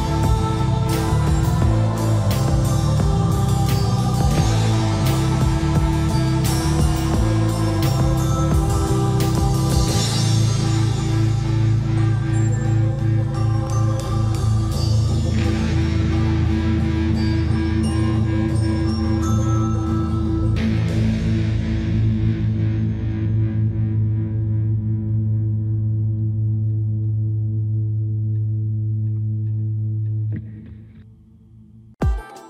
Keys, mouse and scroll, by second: 0.0 click, 0.7-1.0 typing, 3.1 e, 4.2 click, 4.9 e, 5.3 scroll down 1, 5.8 m, 6.5 click, 8.1-9.2 typing, 10.1 scroll down 1, 10.4 middle click, 10.8-11.5 scroll down 1, 11.3-12.1 typing, 15.1-15.9 typing, 17.7 click, 18.3 scroll up 1, 21.9 click, 27.7-31.4 scroll up 1, 32.3 scroll down 1.